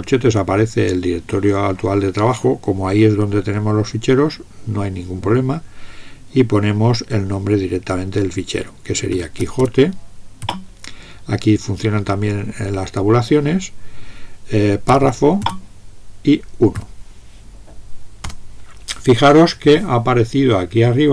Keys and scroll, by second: 8.9-10.1 typing, 10.4 Tab, 14.7-15.6 typing, 16.7 1, 18.3 Return.